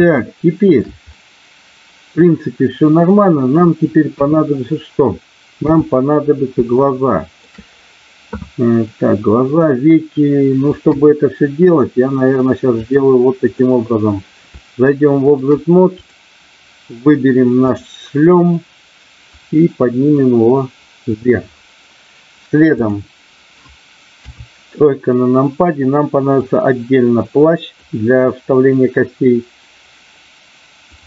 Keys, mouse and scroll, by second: 0.2 shift+middle click, 1.2-3.1 middle drag, 4.1 KP_1, 5.6 KP_3, 6.8 shift+middle click, 10.8 KP_1, 12.8 click, 14.5 shift+middle click, 17.6 click, 19.5-21.1 drag, 24.2 KP_3, 26.3-27.8 drag.